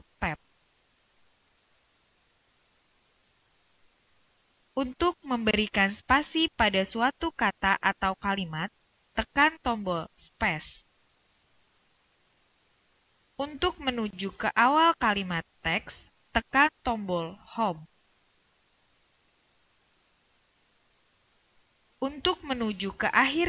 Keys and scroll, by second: 1.6 Tab, 10.0 space, 19.5 Home.